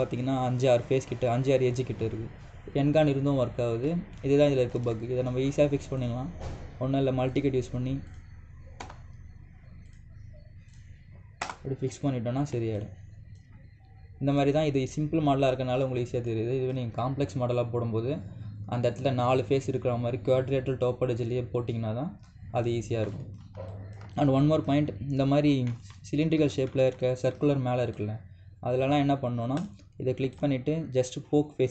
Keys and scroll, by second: 5.5 ctrl+z, 9.5 Return, 12.2 Return.